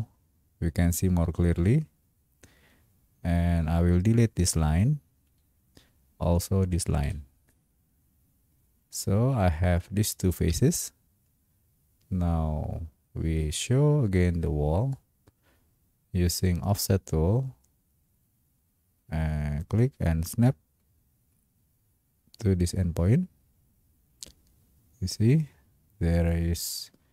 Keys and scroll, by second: 5.5 Delete, 9.7 Delete.